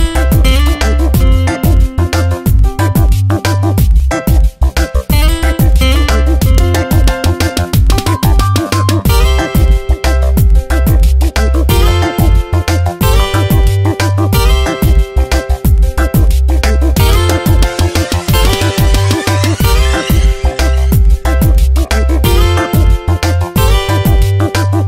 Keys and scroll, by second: 0.9 ctrl+z, 2.1 space, 5.1 space, 10.4 space, 13.8 ctrl+z, 17.5 space, 19.3 space, 21.1 space, 22.8 space.